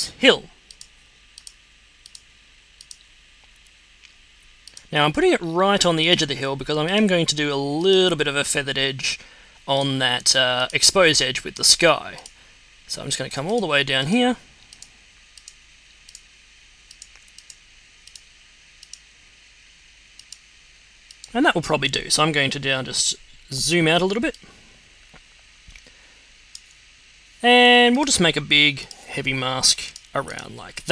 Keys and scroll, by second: 23.6 z.